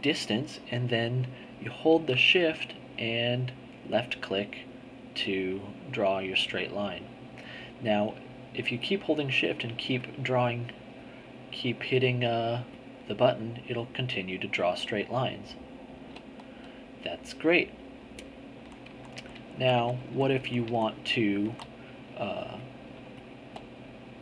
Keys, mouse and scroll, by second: 4.1 shift+click, 8.2-9.7 drag, 10.4 click, 11.7-13.5 drag, 18.5 z, 21.4 z, 22.5 click.